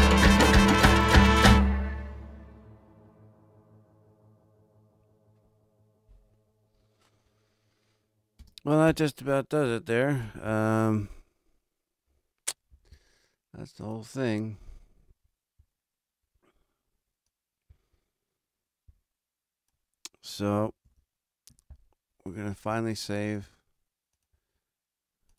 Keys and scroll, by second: 8.3 space, 10.4 super+=, 20.7 super+=.